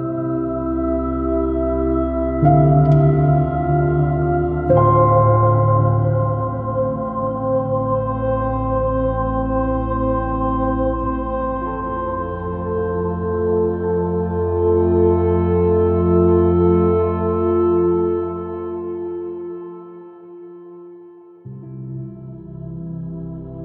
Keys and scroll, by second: 4.4 alt+super++, 4.6 super+b, 16.4 super+-, 22.6 super++.